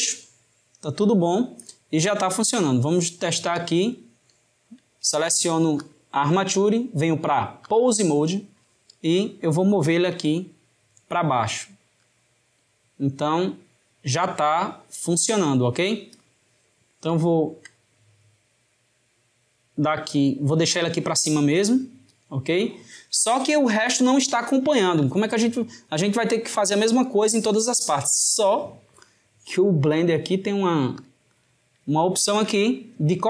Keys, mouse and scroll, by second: 2.0-3.6 shift+middle drag, 3.6 click, 5.9-8.9 drag, 12.1 click, 18.8 drag, 24.4-27.5 shift+middle drag, 30.0-32.1 drag, 32.1-33.2 shift+middle drag.